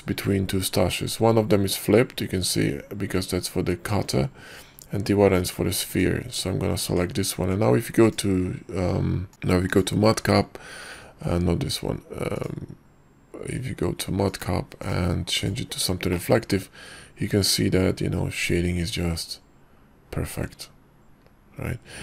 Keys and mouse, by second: 7.0 Tab, 9.8-11.2 drag, 12.5 click, 14.6-15.8 drag, 16.2-18.9 middle drag, 18.9-19.7 drag, 19.7-22.0 middle drag.